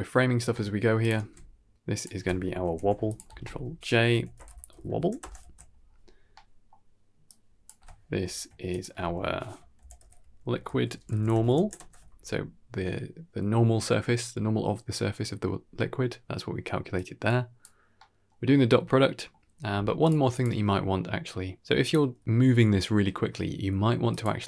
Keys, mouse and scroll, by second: 0.2 scroll up 3, 0.4 middle click, 0.9 middle click, 1.4 click, 2.5 ctrl+j, 3.0 click, 3.2 F2, 4.5 shift+b, 5.3 ctrl+s, 6.2 middle click, 7.1 click, 8.1 ctrl+j, 8.6 click, 8.8 F2, 12.0 ctrl+s, 16.9 click, 17.8 middle click, 18.9 middle click, 19.9 click, 20.2 click, 20.5 g.